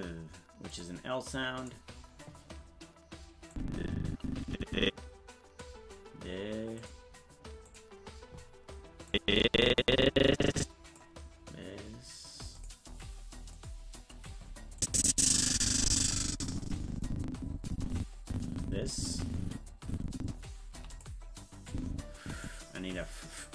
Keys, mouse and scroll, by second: 0.7 click, 1.5 click, 3.5-5.6 drag, 6.8 click, 7.6 click, 9.1-11.0 drag, 12.5 click, 13.5 click, 14.8-20.4 drag, 21.7 click, 21.7 i.